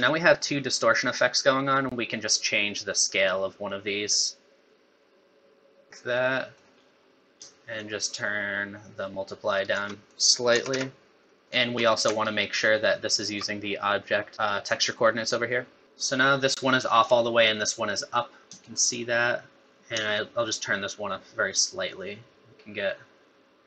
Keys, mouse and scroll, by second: 0.3 middle click, 3.7 click, 6.2 middle click, 6.9-7.2 scroll up 2, 7.8 shift+click, 10.1 click, 11.4 shift+right click, 12.4 alt+right click, 15.2 middle click, 15.8 middle click, 15.8 scroll down 3, 16.8 middle click, 18.6 shift+click, 19.6 middle click, 20.4 shift+click.